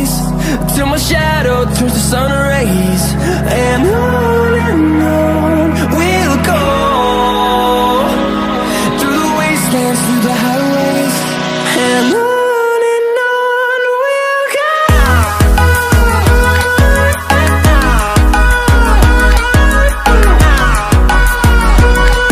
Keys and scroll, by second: 1.8 ctrl+shift+f, 8.8 ctrl+j.